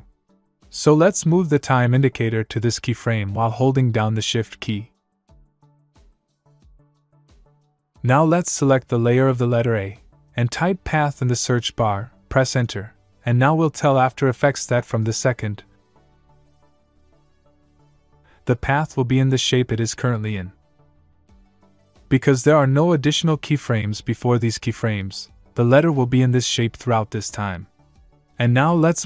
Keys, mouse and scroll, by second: 0.9 click, 10.3 click, 12.1-13.5 typing, 13.5 Return, 20.1 click.